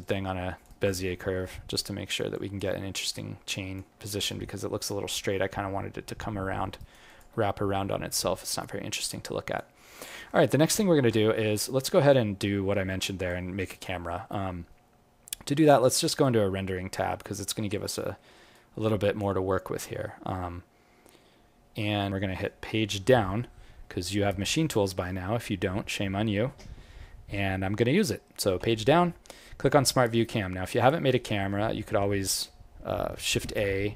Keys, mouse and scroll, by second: 0.7 alt+right click, 1.1 alt+middle click, 1.6 alt+right click, 2.3 alt+click, 2.7 alt+middle click, 3.1 alt+click, 6.8 alt+right click, 7.0 alt+click, 8.5 scroll down 3, 8.6-9.1 scroll up 5, 9.1 alt+click, 10.0 alt+middle click, 11.1 scroll up 1, 11.4-11.7 scroll down 1, 12.0-12.7 scroll down 3, 12.7 alt+middle click, 13.3 alt+click.